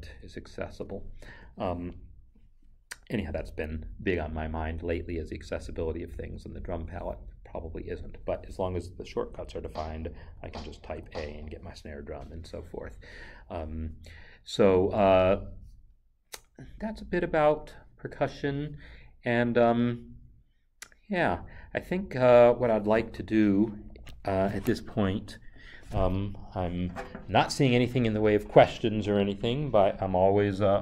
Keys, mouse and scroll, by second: 0.0 Left, 1.2 Escape, 9.5 Escape.